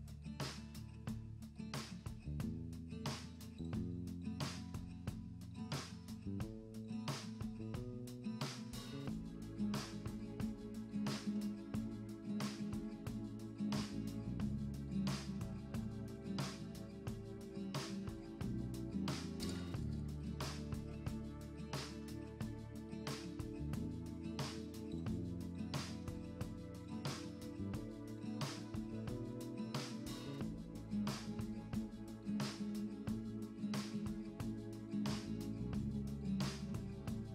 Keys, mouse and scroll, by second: 0.5 scroll down 1, 0.6-1.7 middle drag, 1.7-4.2 typing, 2.5 middle click, 3.0 middle click, 3.9 scroll up 1, 4.4 click, 4.5 scroll up 1, 5.6 scroll up 3, 5.6 scroll down 1, 6.8 scroll down 1, 7.2 click, 8.6 click, 8.7 scroll up 2, 9.1 click, 9.9 click, 10.4-11.0 scroll down 1, 11.0-11.4 shift+middle drag, 11.4 click, 12.0 click, 12.8 KP_0, 13.4 click, 13.9 click, 14.1 KP_0, 14.4 click, 16.1 click, 16.5 click, 16.7 click, 17.4 click, 17.9 click, 19.4 click, 19.7 KP_0, 19.9 click, 20.6 click, 20.8 shift+middle drag, 20.9 scroll up 1, 21.0-22.6 shift+middle drag, 22.6 click, 23.1 click, 23.5 click, 30.4 click, 31.0 click.